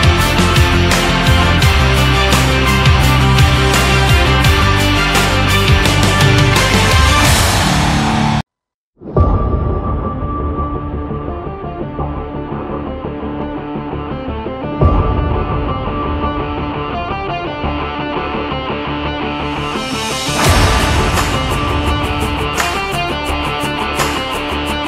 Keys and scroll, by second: 4.1 ctrl+z.